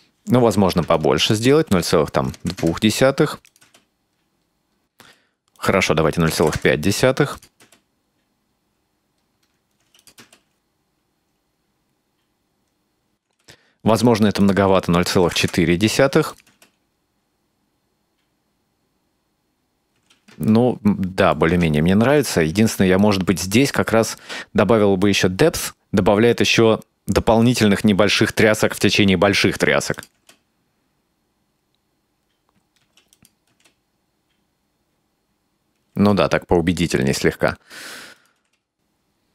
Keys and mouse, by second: 1.0-3.0 shift+drag, 3.5 click, 3.7 space, 5.0 space, 5.6-6.9 drag, 7.4 click, 7.6 space, 9.9 space, 10.0 click, 10.2 space, 13.3 space, 14.5-15.9 drag, 16.3 click, 16.5 space, 20.0 space, 20.5 ctrl+middle click, 21.9 middle click, 25.1-27.5 drag, 30.0 click, 30.2 space, 32.8 space, 33.2 click, 33.5 space, 36.0 space, 38.2 click, 38.4 space.